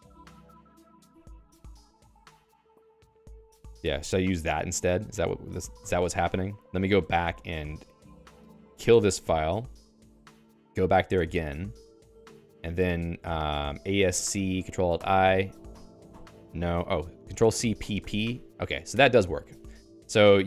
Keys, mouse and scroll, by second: 0.0-4.3 typing, 2.5 Escape, 5.8 ctrl+alt+x, 7.3 Return, 8.3 ctrl+s, 8.9 Return, 10.0 ctrl+f, 10.9 ctrl+j, 11.2 Return, 11.4-14.8 typing, 15.1 ctrl+alt+i, 15.9 ctrl+alt+i, 16.3 ctrl+alt+i, 18.9 Escape, 19.2-20.4 typing.